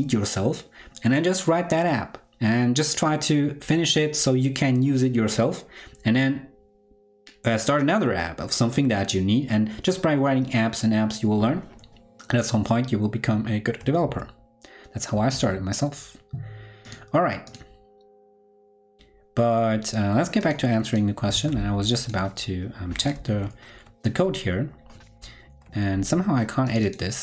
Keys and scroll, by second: 13.9 super+w, 15.3 super+w, 21.2 super+Tab, 23.7 ctrl+Right.